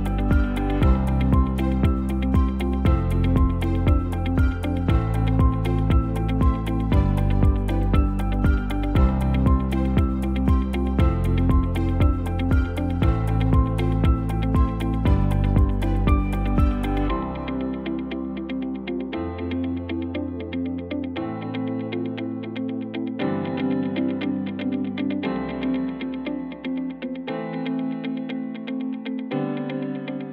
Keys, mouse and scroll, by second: 14.5 ctrl+z.